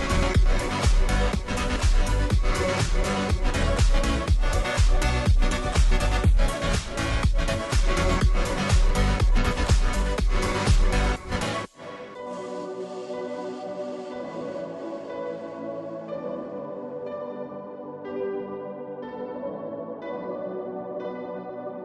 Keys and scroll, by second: 0.0-21.8 typing, 1.0 Right, 2.8 Return.